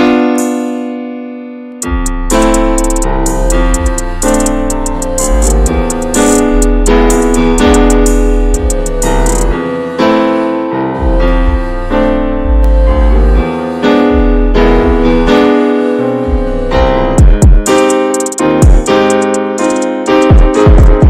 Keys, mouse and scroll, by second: 1.1 ctrl+a, 1.3 drag, 1.6 scroll down 2, 2.0-2.4 shift+middle drag, 2.4 click, 2.6 ctrl+a, 3.3 scroll down 1, 3.5-5.8 middle drag, 5.8 Tab, 6.2-7.7 middle drag, 7.7 Tab, 7.8 click, 8.2 shift+middle click, 8.9 ctrl+s, 9.0 ctrl+s, 9.1 drag, 9.5-10.2 middle drag, 10.2 ctrl+a, 11.0 ctrl+s, 11.3 middle click, 12.1 ctrl+s, 12.1 click, 12.4 scroll down 1, 12.7-13.2 middle drag, 13.2 ctrl+s, 13.2 drag, 13.6-14.5 middle drag, 14.5 click, 15.7 click, 18.1 click, 18.5 middle click, 18.6 ctrl+scroll up 1, 18.9 ctrl+s, 19.1 shift+middle drag, 19.3 scroll up 1, 19.6-21.0 middle drag.